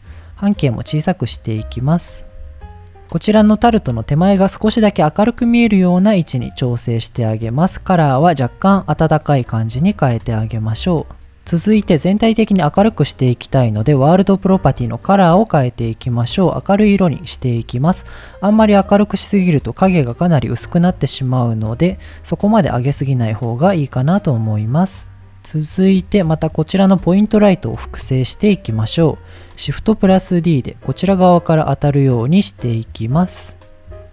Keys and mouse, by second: 0.3-1.7 drag, 2.1 g, 5.3 g, 6.2 click, 7.1 click, 7.8 click, 13.7 click, 21.3 click, 25.5 middle click, 26.9 click, 27.9 KP_7, 29.9 shift+d.